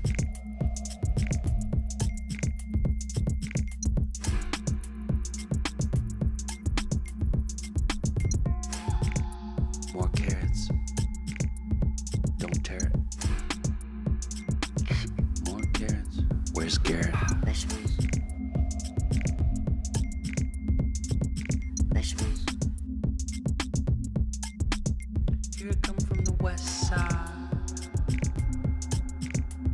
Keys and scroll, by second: 7.2 Down, 7.4-8.0 Down, 9.0-9.9 Down, 10.3 Down, 10.5 Down, 10.7 Down, 10.9 Down, 11.1 Down, 11.3 Down, 22.1-25.4 typing, 25.4 Return, 29.4-29.7 typing.